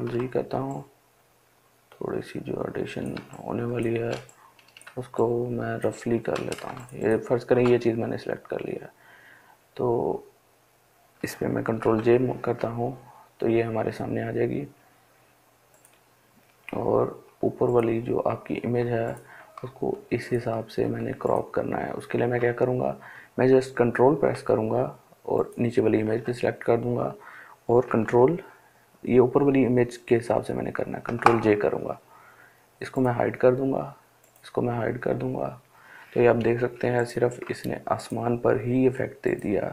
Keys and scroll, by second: 11.1 ctrl+j, 30.3 ctrl+j.